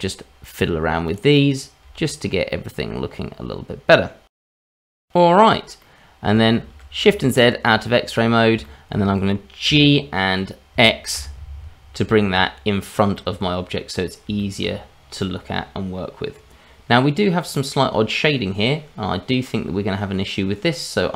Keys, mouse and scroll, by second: 1.3 click, 1.8 g, 4.5-5.0 scroll down 2, 4.9 Tab, 5.8 middle click, 6.6 shift+z, 7.2-8.1 scroll down 3, 8.1 middle click, 8.6 shift+middle click, 9.7 g, 13.1 middle click, 13.9-14.2 scroll up 2, 14.4 shift+middle click, 14.7 scroll up 2, 15.2 middle click, 17.5 middle click.